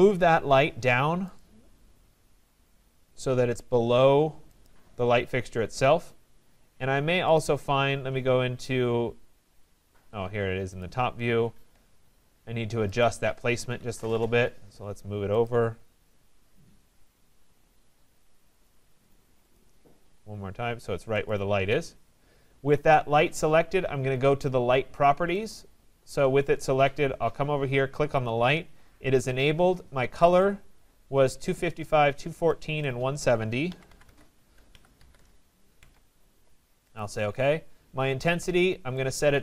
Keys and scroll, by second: 14.1 Return, 34.3 Tab.